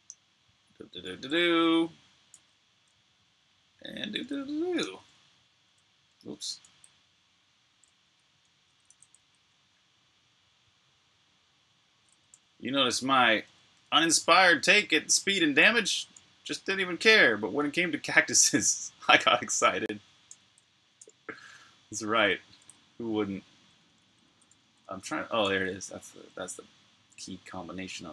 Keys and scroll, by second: 2.4 super+v, 4.6 super+q, 7.8 super+s, 14.4 n, 15.4-16.2 typing, 24.9 n.